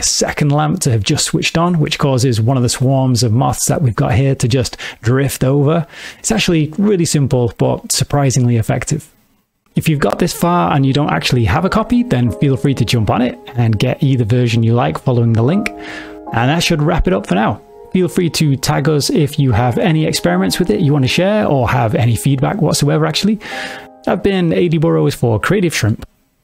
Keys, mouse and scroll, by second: 2.7 g, 6.2 click, 8.6 space.